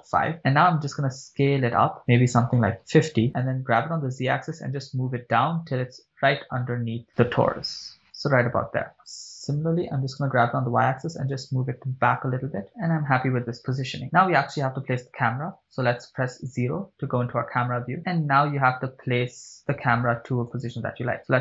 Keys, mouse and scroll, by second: 1.2 s, 3.2 5, 3.2 0, 3.3 Return, 3.9 g, 4.3 z, 8.5 click, 10.4 g, 10.7 y, 12.8 shift+click, 15.8 KP_0, 18.0 scroll down 3, 18.4 scroll up 1, 20.9 click.